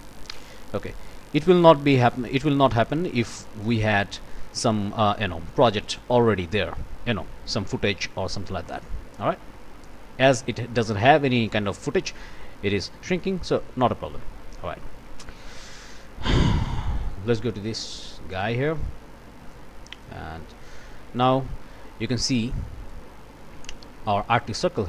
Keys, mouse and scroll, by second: 1.0 click, 1.6 click, 2.9 click, 3.8 click, 8.6 click, 13.3 click, 14.0 click, 14.7 scroll up 1, 14.8 click, 15.9 click, 16.8 click, 18.3 click, 19.5 click, 21.2-23.1 drag.